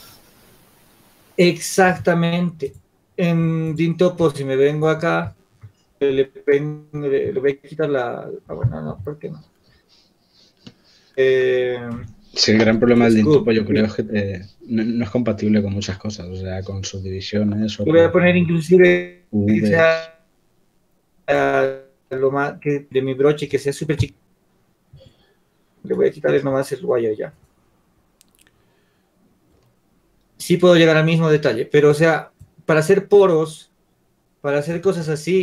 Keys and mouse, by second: 2.2 Tab, 4.3-5.5 drag, 5.5-7.2 middle drag, 7.5 shift+z, 17.6 alt+w, 18.2 alt+w, 28.6 shift+z.